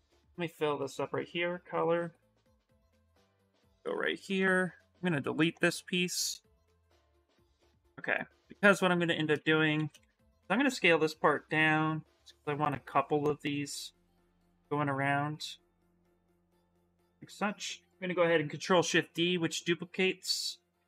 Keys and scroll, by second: 3.8 shift+f, 4.1 shift+f, 8.9-10.4 typing, 18.4 ctrl+shift+d.